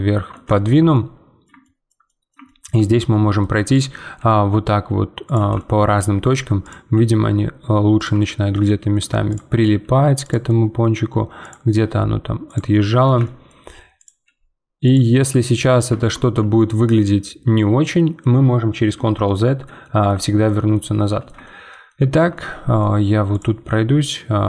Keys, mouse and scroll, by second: 3.7 click, 4.2 g, 5.6-6.6 shift+middle drag, 6.6 click, 6.9 g, 8.2-9.3 middle drag, 9.3 click, 9.8 g, 10.5 middle click, 11.4 click, 11.8 g, 12.7-14.0 middle drag, 14.0 click, 14.2 g, 15.1 middle click, 15.9 Tab, 16.3 scroll down 1, 16.6-18.9 middle drag, 18.9 Tab, 19.2-23.3 middle drag, 23.3 click, 23.6 g.